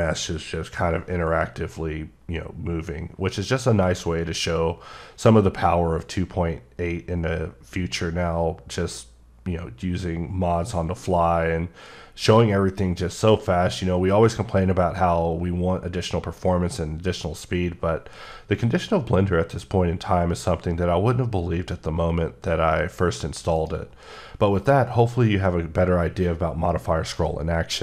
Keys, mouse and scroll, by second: 0.1 scroll up 3, 0.7-1.0 scroll up 3, 1.5 scroll up 1, 2.7 scroll up 4, 3.1-5.7 scroll down 12, 5.8-6.9 scroll up 9, 7.1-8.0 scroll down 8, 8.2 scroll, 8.3-9.6 scroll up 10, 9.8-10.8 scroll down 17, 10.8-11.7 scroll up 10, 12.3-13.0 scroll down 8, 13.2-15.1 scroll up 18, 15.3-15.9 scroll down 11, 16.1-17.2 scroll up 5, 17.6 scroll down 3, 18.3-19.1 scroll up 8, 19.1-20.0 scroll down 4, 20.0 scroll down 3, 20.5 scroll up 5, 21.3-22.2 scroll up 16, 23.6 right click.